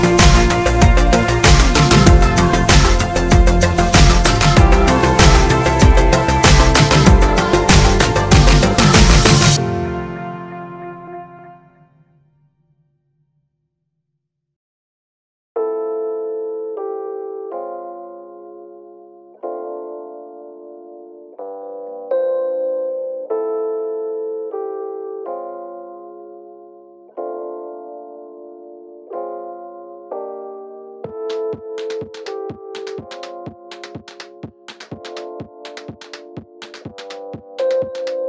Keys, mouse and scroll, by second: 0.9 middle click, 1.1 Tab, 1.3 drag, 1.5 scroll down 1, 1.7 middle click, 3.3 scroll up 1, 3.5 shift+middle click, 3.7 click, 3.8 Tab, 4.1 middle click, 5.2 alt+click, 5.6 middle click, 8.0 ctrl+click, 8.2-11.9 middle drag, 8.9 ctrl+click, 9.8 scroll down 2, 10.8-11.9 scroll up 2, 11.9 shift+click, 12.3 ctrl+z, 15.0-17.5 middle drag, 15.5 z, 17.1 shift+d, 17.5 Return, 17.8 Tab, 18.3 click, 18.5 click, 18.8 click, 19.3 z, 19.6 click, 21.0-23.5 drag, 21.4 Tab, 22.2 a, 23.5 middle click, 23.6 Tab, 23.8-27.4 middle drag, 24.1 click, 24.7 scroll up 2, 27.4-27.7 scroll down 1, 27.7 click, 27.9 Tab, 28.0 middle click, 28.9 click, 29.7 ctrl+click, 30.5-32.5 ctrl+drag, 32.5 middle click, 33.0 ctrl+click, 33.6-35.0 middle drag, 34.5 shift+d, 34.6 Return, 35.0 Tab, 35.3 click, 35.7 shift+click, 36.2 ctrl+j, 36.5 Tab, 37.5-38.2 middle drag, 38.1 ctrl+i.